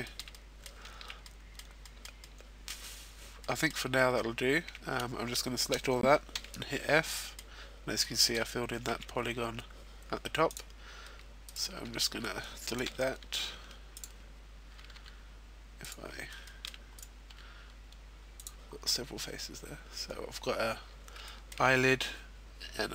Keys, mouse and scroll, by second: 1.4 middle click, 1.4-1.9 scroll down 2, 1.9 middle click, 3.1 a, 5.8 middle click, 5.8 f, 6.7 shift+middle click, 7.3-8.4 scroll up 2, 7.7 ctrl+Tab, 10.4 right click, 11.9 x, 15.8 shift+middle click, 16.7 right click, 16.7 x, 18.6-19.6 scroll up 5, 19.6-20.9 scroll down 3, 20.9 shift+middle click, 21.4-22.0 scroll down 2.